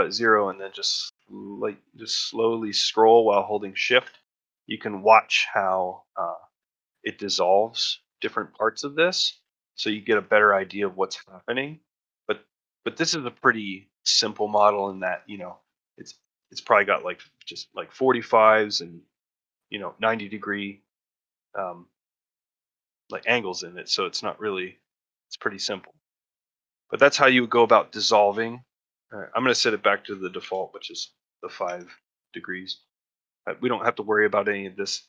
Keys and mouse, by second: 5.7 middle click, 6.2 shift+middle click, 6.5 middle click, 7.4 middle click, 8.4 middle click, 9.0 middle click, 9.6 shift+middle click, 9.9 ctrl+middle click, 10.2 shift+middle click, 12.6 middle click, 13.1 middle click, 13.4 middle click, 14.1 shift+middle click, 14.5 ctrl+middle click, 14.8 shift+middle click, 16.4 shift+middle click, 17.0 ctrl+middle click, 17.7 shift+middle click, 19.3 shift+middle click, 19.6 middle click, 21.0 middle click, 22.6 shift+middle click, 22.9 middle click, 23.6-25.6 middle drag, 25.9 shift+middle click, 26.1 middle click, 26.5 shift+middle click, 26.9 ctrl+middle click, 27.3 middle click, 29.2 click, 30.0-32.6 drag.